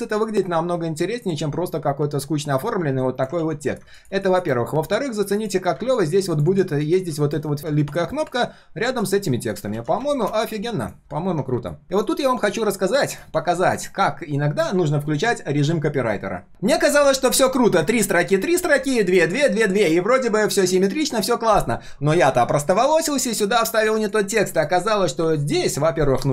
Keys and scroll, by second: 3.4 ctrl+z, 9.7 ctrl+z, 10.4 ctrl+z, 23.6 ctrl+v.